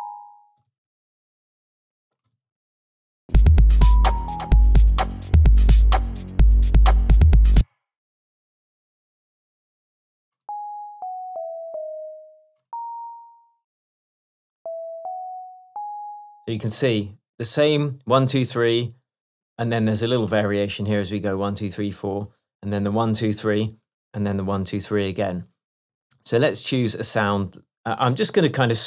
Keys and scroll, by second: 0.8 super+c, 2.4 super+v, 7.6 space, 11.0 Down, 15.0 Up, 15.2 Right, 15.8 Up, 26.1 shift+Tab.